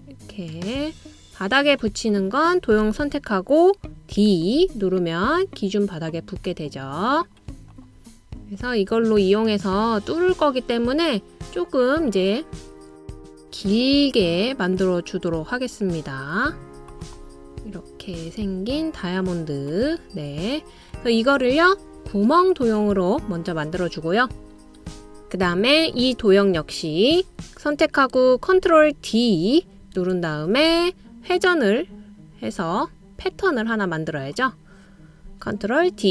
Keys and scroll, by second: 4.6 o, 28.8 super+o, 30.4 super+space.